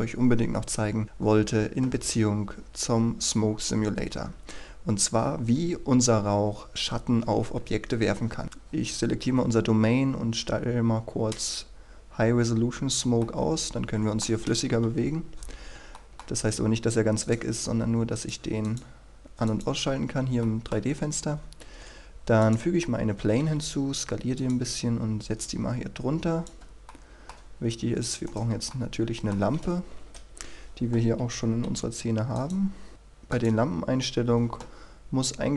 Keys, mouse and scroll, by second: 11.3 click, 13.2-14.3 middle drag, 14.8 KP_1, 15.2-15.7 scroll down 1, 15.9 shift+middle click, 17.2 click, 20.0 scroll up 1, 20.4 shift+middle click, 22.4 click, 26.9 middle click, 27.3-28.2 scroll down 1, 28.2 right click, 28.7 middle click, 29.7 KP_1, 30.1 KP_3, 31.6 g, 32.3 click, 32.9 middle click, 33.3 click, 34.9-35.5 scroll down 1.